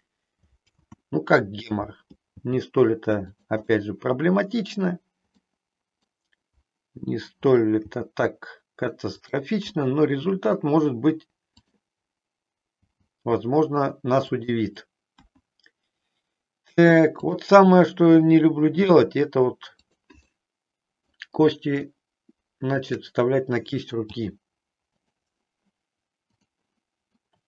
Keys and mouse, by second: 0.7 ctrl+z, 2.3 g, 3.5 click, 3.8-4.9 middle drag, 5.4 middle click, 7.7 g, 9.2 click, 9.9 middle click, 11.5 click, 12.9 g, 15.2 KP_1, 18.8 e, 19.9 click, 20.3 middle click, 21.9-22.9 shift+middle drag, 24.2 g, 26.4 click, 27.2-27.4 middle drag.